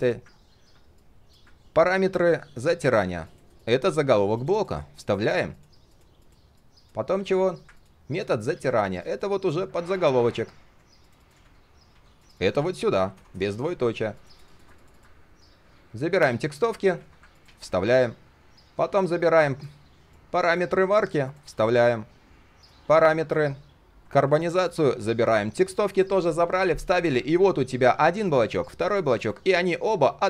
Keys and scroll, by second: 3.0 ctrl+x, 4.6 ctrl+shift+v, 8.5 ctrl+x, 11.4 ctrl+shift+v, 11.9 ctrl+z, 12.5 ctrl+shift+v, 16.9 ctrl+x, 17.4 ctrl+a, 17.6 ctrl+shift+v, 20.6 ctrl+x, 21.4 ctrl+a, 21.6 ctrl+shift+v, 24.0 ctrl+x, 24.8 ctrl+a, 25.0 ctrl+shift+v.